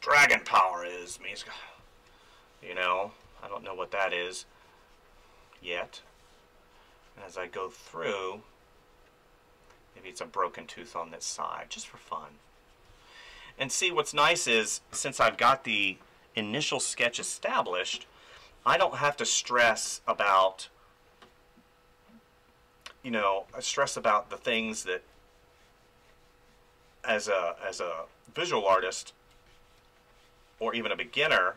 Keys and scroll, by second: 1.1 space, 3.2 space, 5.6 space, 12.9 space, 18.7 space, 23.2 space, 28.5 space.